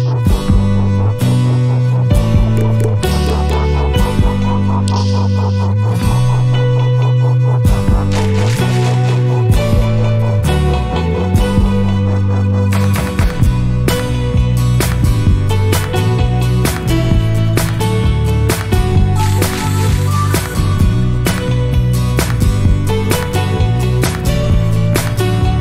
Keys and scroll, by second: 6.5-7.4 typing, 13.5-14.4 typing, 21.3-21.9 typing.